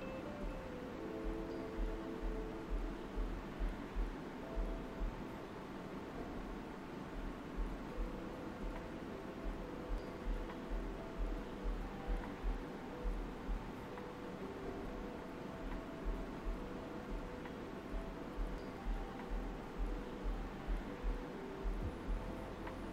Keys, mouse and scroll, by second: 1.1 space, 1.2 click, 1.5 space, 2.3 right click, 3.3-10.3 drag, 10.3 right click, 10.6 right click, 11.3 alt+right click, 14.4-18.3 drag, 18.3 alt+right click, 20.1 space, 20.5 click, 20.6 space, 21.1 right click, 22.2-22.9 alt+right drag.